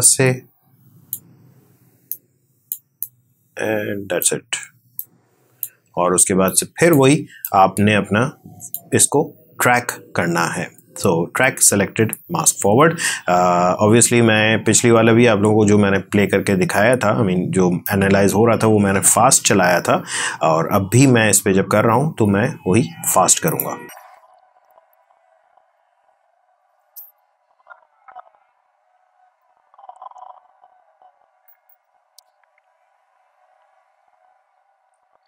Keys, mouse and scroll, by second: 19.3-21.6 drag, 23.3 click.